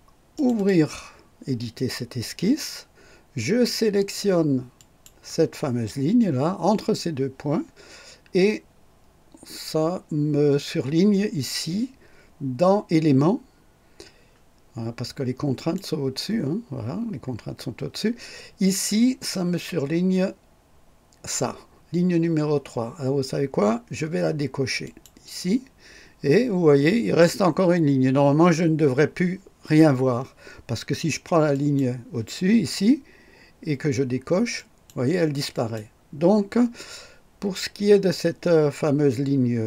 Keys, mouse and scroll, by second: 0.3 click, 4.8 click, 15.5 click, 24.8 click, 31.5 click, 34.5 click, 35.5 click.